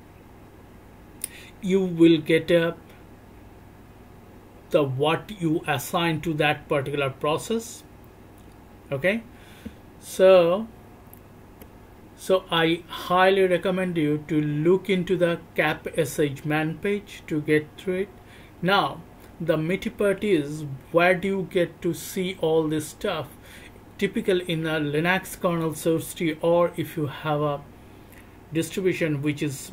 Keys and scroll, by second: 9.6-10.6 BackSpace, 11.0 BackSpace.